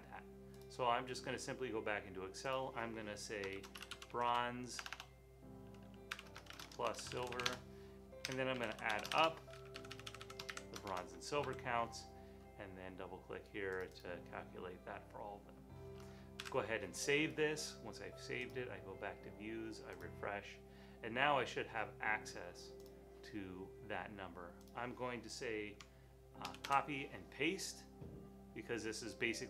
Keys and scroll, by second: 3.3-11.9 typing, 16.4 super+s, 26.5 super+c.